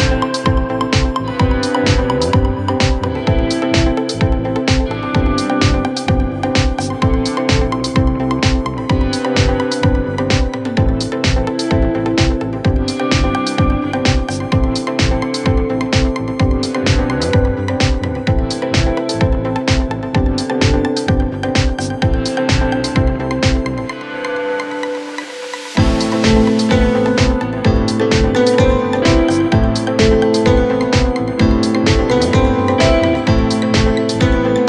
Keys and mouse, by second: 8.0 s, 8.9 s, 10.1 middle click, 11.1-34.4 drag, 15.8 KP_Divide, 31.7 shift+a, 33.8 s, 34.4 middle click.